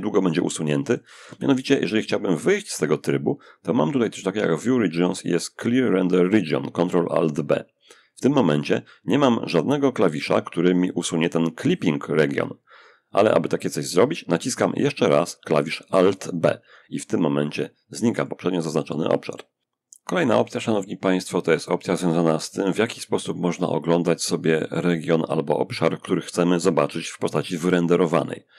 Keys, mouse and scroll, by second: 0.0 shift+middle click, 0.1 shift+click, 2.0 click, 15.8 alt+b, 16.7 alt+middle click, 17.4-19.5 drag, 20.8 click, 27.9 click.